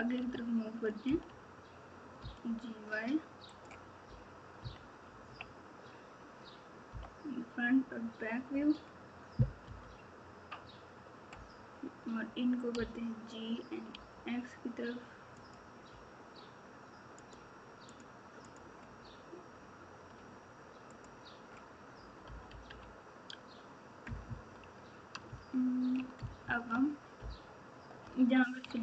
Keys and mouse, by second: 4.5 KP_3, 5.1 KP_1, 5.2 KP_1, 6.9 KP_9, 9.6 KP_Divide, 12.7 g, 17.2 click, 20.9 shift+click, 22.2 KP_4, 22.4 KP_4, 24.0 KP_Add, 24.2 KP_Add, 25.2 ctrl+KP_2, 25.7 ctrl+KP_2, 26.1 KP_Add, 26.4 KP_Add, 26.5 KP_Add, 27.1 ctrl+KP_8, 27.6 ctrl+KP_8.